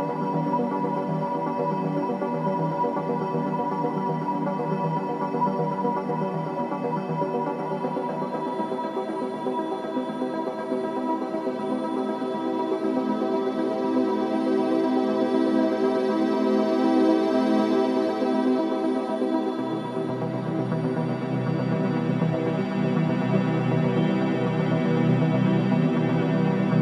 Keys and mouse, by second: 1.8-3.4 alt+drag, 3.7 alt+shift+drag, 4.2-4.8 alt+drag, 4.9 click, 5.2-5.8 drag, 6.0 click, 6.7 Tab, 7.3-8.3 drag, 9.1-10.3 drag, 10.3-11.1 typing, 12.6-14.2 drag, 14.5-20.3 alt+drag, 21.6 click, 22.4 ctrl+alt+click, 23.6 typing, 24.8 typing.